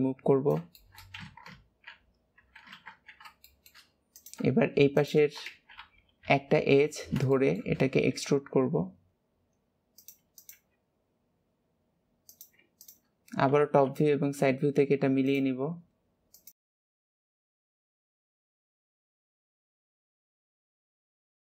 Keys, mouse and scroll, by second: 0.7 shift+middle click, 1.1 z, 3.4 shift+middle click, 4.0 click, 4.8 shift+click, 5.4 alt+z, 6.0 KP_3, 7.2 shift+middle click, 7.7-8.0 scroll up 1, 10.3 click, 10.4 g, 12.7 shift+click, 13.6 KP_7, 14.3 scroll up 3, 15.2 click, 15.4 g, 16.6 shift+middle click, 16.9 click, 17.0 g, 17.5 shift+click, 17.7 shift+middle click, 17.9 e, 18.5 click, 18.6 g, 19.4 click, 19.6 g, 20.0 shift+click, 20.6 KP_3, 20.8 ctrl+KP_1.